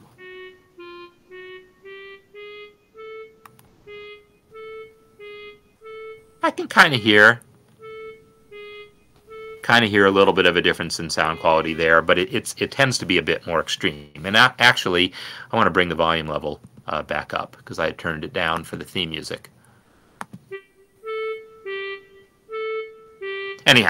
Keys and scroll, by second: 2.1 Up, 2.6 Up, 3.2 Up, 4.1 Down, 4.7 Up, 8.1 Up, 8.1-9.6 typing, 8.8 Down, 9.6 Up, 11.8 Down, 14.4 F10, 21.4 Right, 21.9 Left.